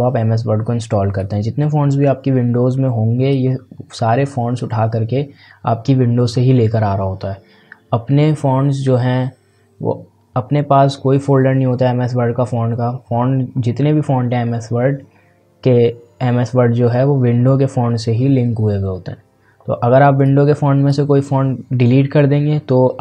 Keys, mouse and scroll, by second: 1.2-5.5 drag, 20.2-23.0 drag.